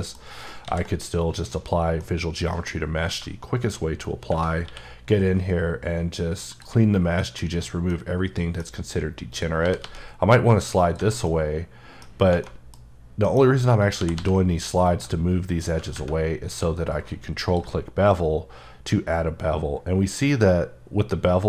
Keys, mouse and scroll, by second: 0.1-0.6 scroll down 2, 0.6 ctrl+a, 1.5 click, 2.0 middle click, 2.8 scroll up 1, 4.6 q, 6.5 click, 7.2 middle click, 8.7 scroll up 1, 9.3 click, 9.6 g, 9.8 g, 10.8 click, 11.2 middle click, 12.4 middle click, 12.9-13.2 scroll up 1, 13.2 middle click, 13.8 click, 14.0 g, 14.1 g, 14.8 click, 16.2 scroll up 2, 16.5 q, 20.3 click.